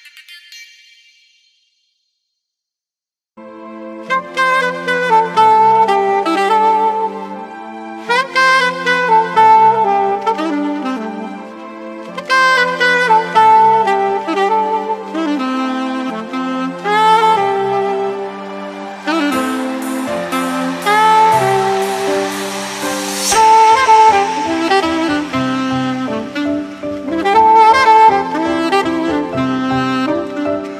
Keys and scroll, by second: 1.1 super+-, 9.4 super+=, 9.8 super+=.